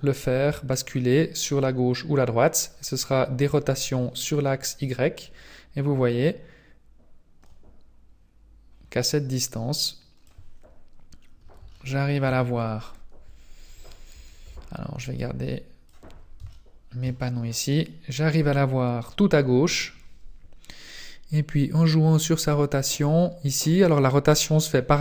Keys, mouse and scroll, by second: 3.4 click, 3.6 click, 11.0-11.5 scroll up 4, 11.7 shift+middle click, 13.7-14.1 scroll up 1, 13.7 n, 14.1 n, 14.4 t, 15.1 click, 16.1-16.5 scroll down 2, 16.5 shift+middle click, 17.2-17.8 scroll up 3, 18.0-18.3 scroll down 1, 19.7 scroll down 2, 21.3 click.